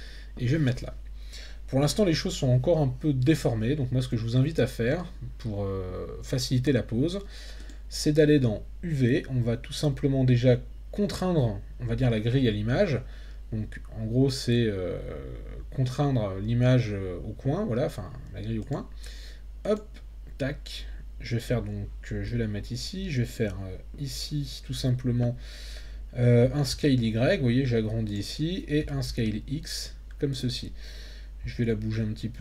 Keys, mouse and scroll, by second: 7.6-16.9 drag, 18.7-19.7 drag, 22.3 g, 23.3 click, 26.4 s, 26.7 y, 28.1 click, 28.8 s, 29.1 x, 30.3 click, 31.4 g.